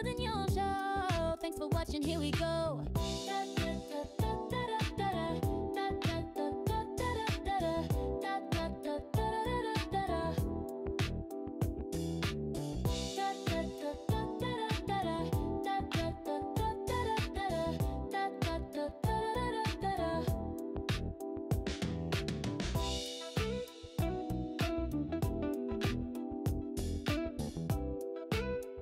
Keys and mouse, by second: 4.1-5.9 drag, 11.1 click, 12.1 click, 13.2 click, 14.3 alt+shift+click, 17.1 s, 22.3 click, 23.6-25.0 drag, 26.2 click, 28.1 g.